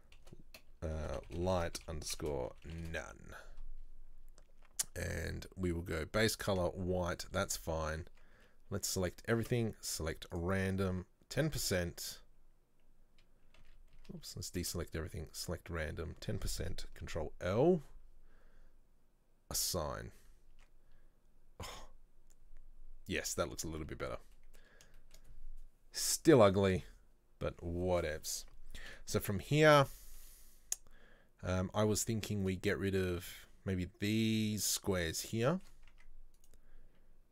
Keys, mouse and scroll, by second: 8.2 Tab, 8.5 a, 9.5 space, 14.1 a, 14.7 space, 17.1 ctrl+l, 19.7 click, 20.7 Tab, 23.9-24.5 scroll up 2, 24.5-27.5 middle drag, 27.5-28.0 scroll down 1, 28.0-29.0 middle drag, 29.0 KP_7, 29.7-30.1 scroll up 2, 30.1-33.1 shift+middle drag, 35.6-36.0 shift+middle drag, 36.0 Tab, 36.5 right click.